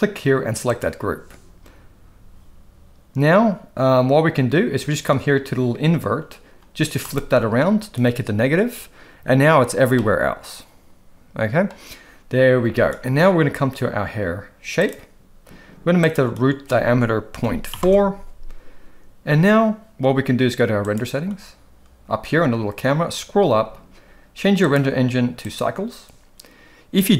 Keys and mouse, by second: 9.9-11.7 middle drag, 14.9 click, 16.1-17.9 drag, 24.6-25.6 drag.